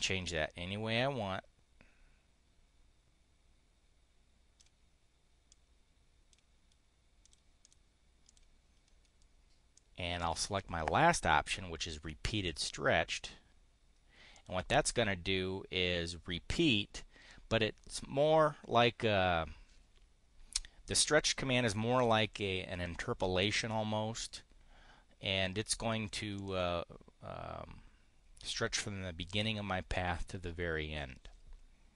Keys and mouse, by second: 5.4 click, 7.1 click, 7.5 click, 8.1 click, 9.7-12.7 drag, 14.2 click, 26.3 click.